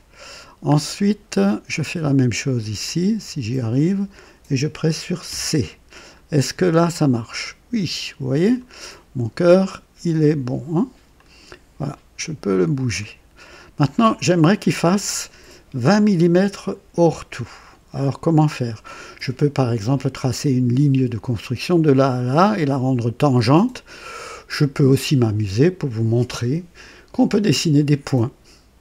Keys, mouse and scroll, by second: 0.4 scroll down 2, 0.9 right click, 2.8 click, 5.2 c, 5.9-6.2 scroll down 1, 6.9-8.7 drag, 8.8-9.5 right drag, 11.1-14.1 drag, 12.0 typing.